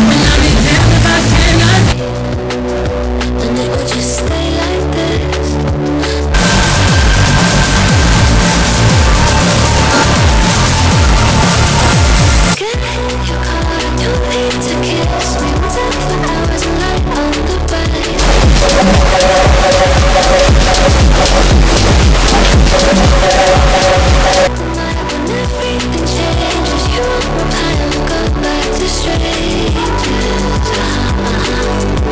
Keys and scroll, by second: 2.0 Page_Down, 13.0 Page_Down, 24.7 Page_Down.